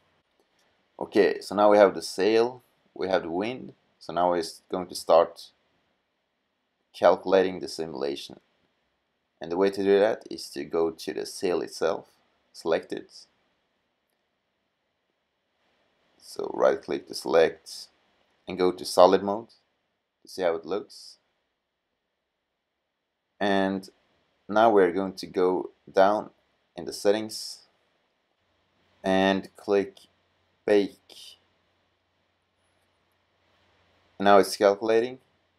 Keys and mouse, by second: 6.8-8.0 middle drag, 19.6-21.5 middle drag.